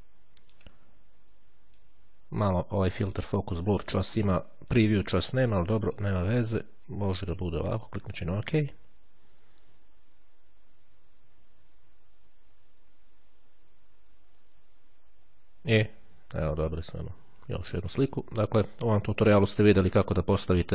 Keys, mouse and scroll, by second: 2.0-3.8 drag, 4.7-6.6 drag, 8.3 click.